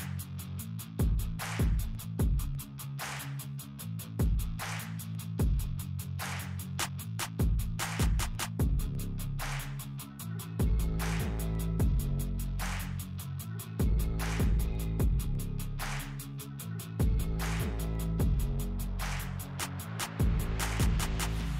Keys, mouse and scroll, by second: 6.7 p, 9.2 click, 12.8 space, 13.6-16.1 drag, 16.1 scroll up 1, 17.1-19.8 drag, 19.8 shift+right click, 20.9-21.5 alt+drag.